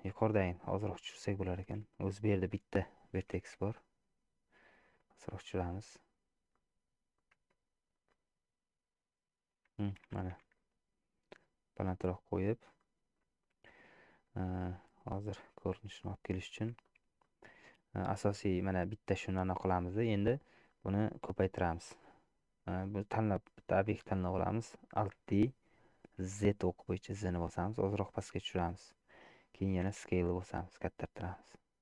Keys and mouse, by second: 1.0 click, 3.2 g, 6.6 middle click, 7.5 Tab, 8.2-9.6 middle drag, 10.3 g, 12.9 shift+middle click, 15.6 middle click, 16.9 shift+middle click, 17.3-18.5 middle drag, 19.6 shift+click, 20.4 shift+click, 23.4 click, 25.3 alt+d, 29.9 s.